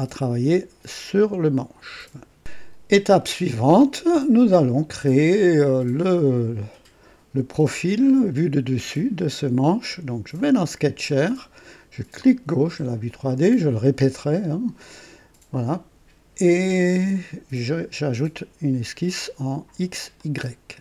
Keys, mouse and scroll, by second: 1.7 right click, 2.4 click, 10.5 click, 12.1 click, 15.5 click, 20.1 click.